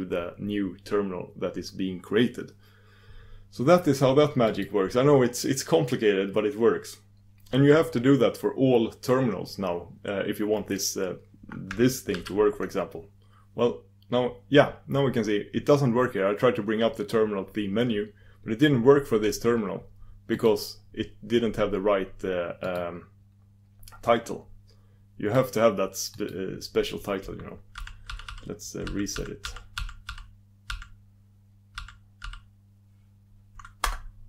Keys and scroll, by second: 13.6 super+d.